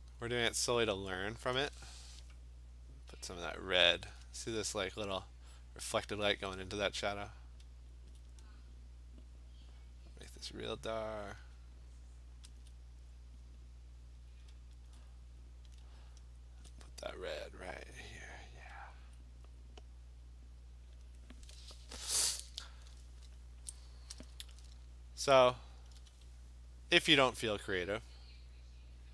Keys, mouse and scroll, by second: 0.4 click, 0.5 click, 0.8 click, 3.9 alt+click, 8.1 alt+click, 11.4 click, 12.6 alt+click, 14.4 click, 14.9 alt+click, 15.7 click, 16.6 alt+click, 18.1 click, 18.6 click, 19.0 alt+click, 20.6 click, 21.0 click, 24.2 click, 24.3 alt+click, 27.3 click, 27.5 click, 27.6 alt+click, 28.2 click, 28.3 click.